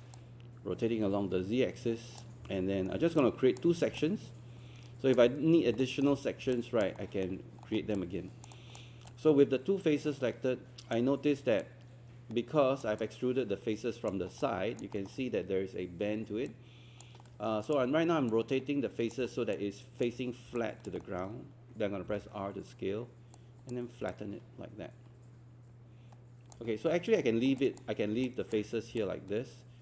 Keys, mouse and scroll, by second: 0.2-2.8 drag, 2.9 scroll up 2, 3.2 click, 4.0 alt+click, 5.8 alt+middle click, 6.6 alt+click, 7.0 alt+middle click, 7.6 scroll up 1, 8.0 alt+click, 8.6-11.0 alt+drag, 11.6-12.8 drag, 13.0 alt+click, 14.4 alt+click, 15.0 alt+middle click, 16.5 alt+click, 17.2 alt+middle click, 17.6 alt+click, 18.3 click, 19.4 alt+scroll down 1, 20.6 alt+click, 21.2 alt+middle click, 23.4 click, 24.1-26.6 alt+drag, 26.7 scroll up 1, 26.9 alt+middle click, 27.4 alt+scroll down 1, 28.3 alt+click, 29.0 alt+click.